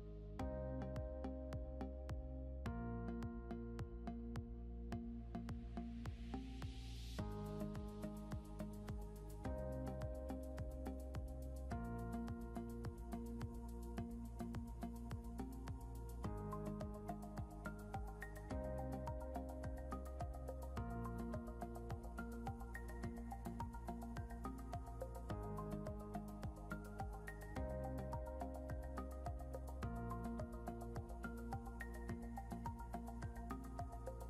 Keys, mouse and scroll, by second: 3.7 ctrl+click, 4.5 scroll up 1, 7.6 ctrl+click, 14.3 scroll down 1, 14.9-15.3 scroll down 1, 19.2 double click, 21.1 scroll down 1.